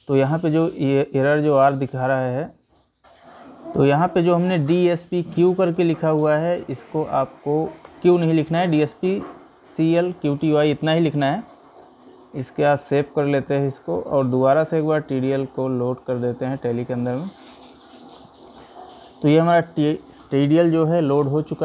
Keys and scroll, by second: 21.0 Escape.